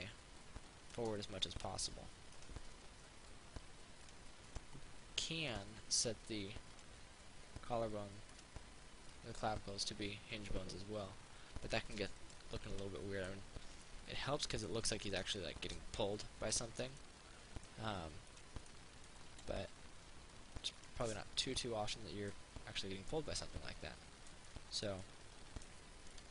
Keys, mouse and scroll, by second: 1.6 ctrl+z, 2.6 right click, 4.3 click, 5.7 right click, 7.0 click, 8.6 right click, 9.4-12.7 drag, 13.5-14.9 middle drag, 18.6 right click, 19.1 middle click, 21.0 click, 21.2-25.1 middle drag.